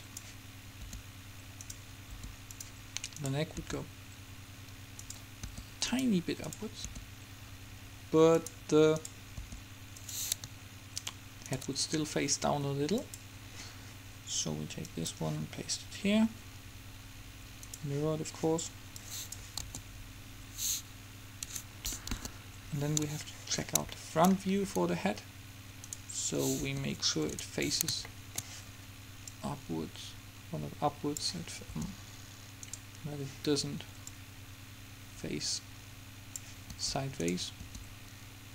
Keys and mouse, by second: 1.0 r, 2.3 r, 3.3-4.8 right drag, 3.8 r, 5.6 r, 7.0 r, 9.6 r, 10.9 right click, 11.4-13.5 right drag, 13.5-16.8 drag, 17.8-20.8 drag, 19.8 alt+a, 21.6 Escape, 22.4 KP_1, 26.0-27.8 right drag, 26.8 r, 27.8 middle click, 29.4-31.3 drag, 31.9 r, 34.3-35.8 drag, 36.8 r, 37.8 r.